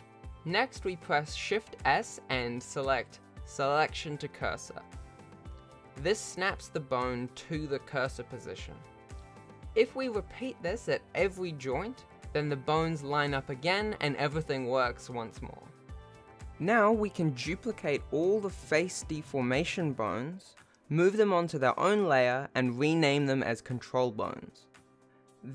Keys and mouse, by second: 0.6 click, 0.9 click, 1.6 click, 2.7 shift+s, 4.2 click, 5.9 click, 6.7 shift+s, 7.4 shift+middle click, 7.9 shift+middle click, 8.7 click, 10.1 click, 10.5 click, 11.2 shift+s, 12.6 click, 13.2 click, 13.6 shift+s, 14.2 shift+middle click, 14.8 ctrl+s, 15.5 shift+middle click, 16.1 shift+click, 16.4 shift+click, 16.6 shift+click, 17.0 shift+click, 18.5 shift+d, 20.9 m, 25.0 Return.